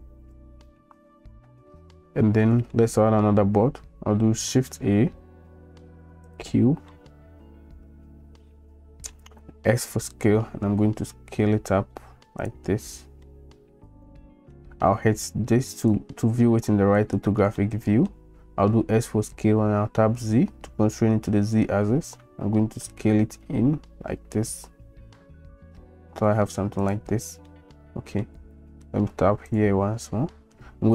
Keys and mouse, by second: 2.5 click, 4.7 shift+a, 6.9-7.3 drag, 7.3 middle click, 7.7-8.1 middle drag, 8.3 middle drag, 8.5 click, 8.6-9.1 middle drag, 9.8 s, 13.2-14.5 drag, 17.6-18.1 shift+middle drag, 18.8 s, 27.5 middle click.